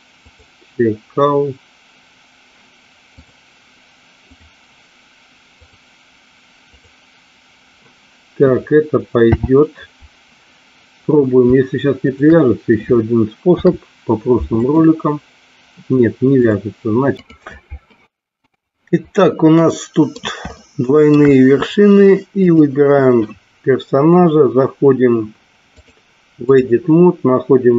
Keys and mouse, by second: 0.2 click, 3.1 click, 4.2 click, 5.4 click, 6.7 click, 9.3 n, 13.5 ctrl+p, 16.3 click, 19.6 middle click, 20.6 shift+middle click, 22.4 click, 26.0 click.